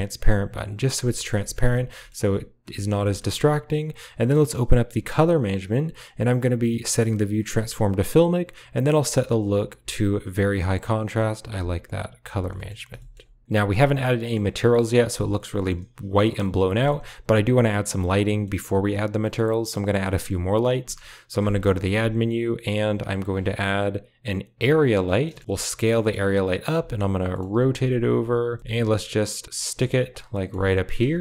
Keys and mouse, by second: 0.4 click, 1.0 middle click, 1.3 shift+middle click, 1.8 shift+middle click, 2.1-2.5 middle drag, 2.6 shift+middle click, 2.9 middle click, 8.4-10.4 drag, 12.1 click, 12.4 shift+middle click, 12.8 shift+middle click, 13.9-14.2 middle drag, 15.4 middle click, 16.2 middle drag, 18.3 middle click, 19.1 middle click, 19.9 middle click, 21.4 shift+a, 25.1 middle click, 25.4 s, 27.2 click, 27.4-31.2 typing, 28.4 click, 30.0-30.4 middle drag.